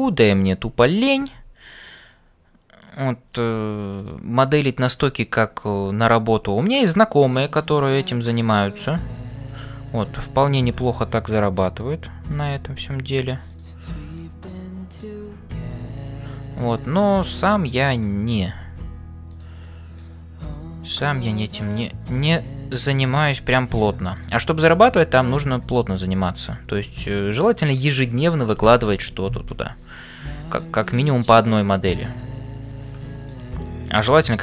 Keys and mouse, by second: 0.0-34.4 typing, 0.2 click, 4.6 middle click, 7.2 middle click, 8.4 middle click, 9.5 middle click, 14.6 middle click, 17.1 click, 17.5 middle click, 19.6 middle click, 20.5 click, 22.5 middle click, 23.5 click, 25.6 middle click, 30.4 shift+middle click, 30.8 middle click, 33.1 shift+middle click.